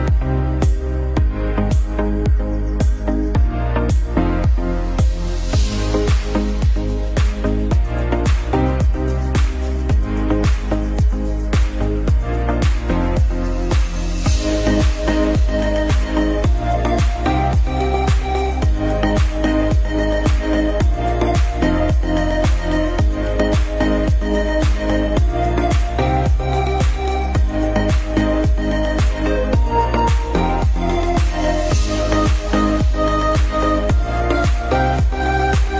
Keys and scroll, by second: 0.7 Escape, 5.1 shift+F2, 10.5 shift+Page_Down, 12.8 Escape, 28.5 space, 28.7 F2.